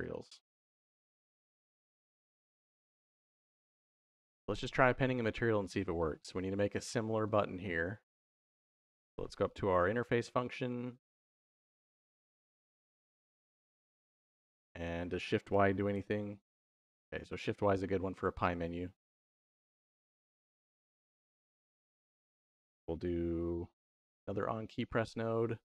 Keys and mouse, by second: 0.8 middle click, 1.7 middle click, 3.5 middle click, 5.5 middle click, 6.1 middle click, 7.1 middle click, 8.3 middle click, 9.0 middle click, 9.5 middle click, 10.5 middle click, 12.0 click, 12.7 g, 13.9 middle click, 14.6 click, 15.7-17.0 typing, 19.5 click, 23.8 shift+a.